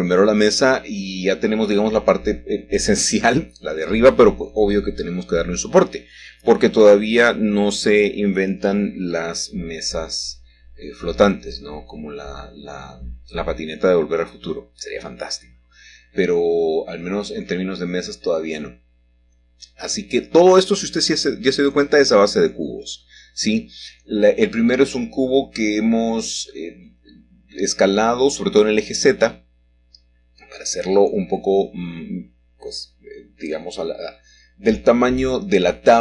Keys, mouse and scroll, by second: 0.1 click, 1.2 1, 2.5 scroll up 1, 3.1 shift+middle click, 4.1-5.1 shift+middle drag, 5.2 g, 6.0 x, 9.5 shift+click, 15.9-17.0 middle drag, 17.0 x, 20.2 click, 22.0 s, 24.2 click, 25.6 g, 26.6 x, 28.2 click, 30.8 middle click, 31.6 g, 32.9 y, 35.0 click.